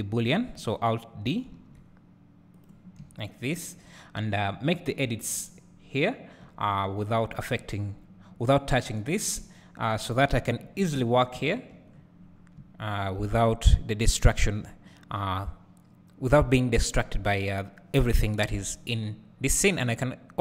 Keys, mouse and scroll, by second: 1.7 alt+d, 2.7 click, 3.1 `, 5.2 Tab, 9.2 click, 10.8 KP_Decimal, 11.7 `, 12.4 scroll down 1, 13.2 `, 19.8 click.